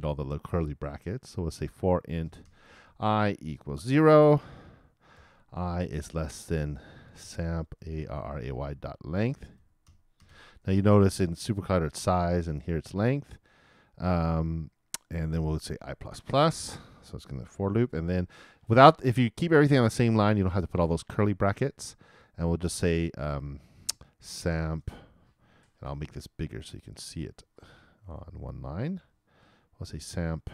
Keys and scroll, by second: 5.7 shift+\, 5.9 shift+,, 6.9 shift+s, 16.1 shift+|, 16.4 shift+=, 17.5 shift+0, 17.9 shift+space.